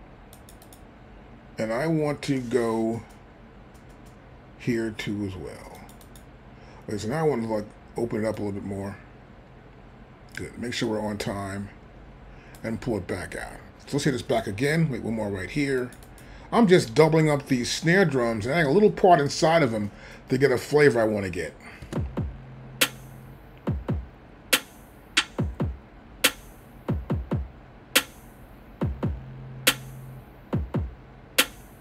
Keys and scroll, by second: 21.9 space.